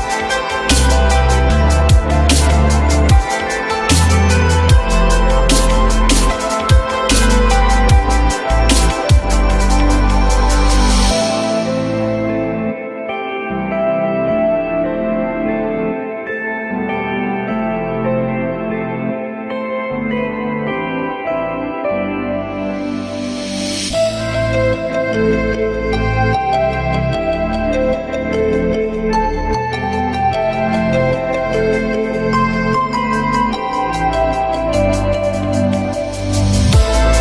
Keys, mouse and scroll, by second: 0.1 ctrl+z, 1.1 ctrl+z, 1.6 ctrl+z, 2.0 ctrl+z, 4.0-4.9 typing, 7.1-8.0 typing, 10.0 ctrl+z, 15.8 typing, 16.9-18.2 typing, 22.7 ctrl+z, 32.4 q, 32.9 alt+middle click, 34.0 alt+middle click, 34.1 alt+middle click, 34.1 alt+middle click, 35.2 alt+middle click, 35.3 alt+middle click, 35.4 alt+middle click, 35.5 alt+double middle click.